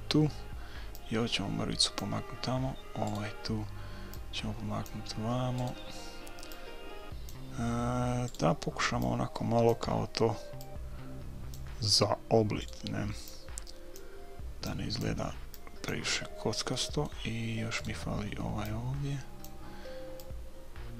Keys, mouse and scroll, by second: 0.9-2.7 drag, 3.1-4.8 right drag, 4.2-5.7 drag, 5.5 right click, 5.9 right click, 7.6 click, 8.4-10.2 right drag, 9.1-12.4 drag, 12.6-14.4 right drag, 13.3-17.3 drag, 16.7 right click, 16.9-18.7 middle drag, 17.8-19.5 right drag, 18.7-20.9 drag.